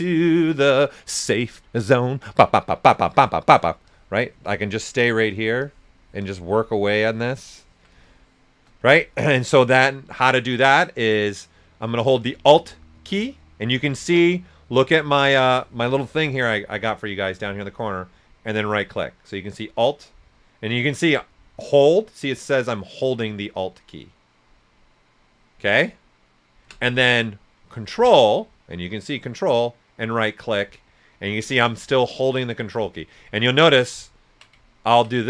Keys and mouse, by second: 2.8 click, 6.8 ctrl+right click, 7.5 alt+click, 8.0 shift+click, 8.9 ctrl+right click, 17.3-27.3 alt+right drag, 29.7 ctrl+right click, 34.0 ctrl+right click, 34.7 ctrl+right click.